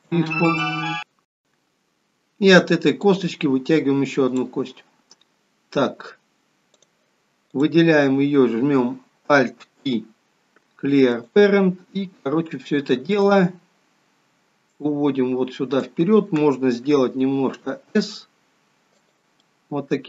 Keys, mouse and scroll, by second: 3.1 click, 6.8 click, 7.5 click, 9.9 alt+p, 13.1 click, 14.7 click, 17.6 s, 19.5 middle click.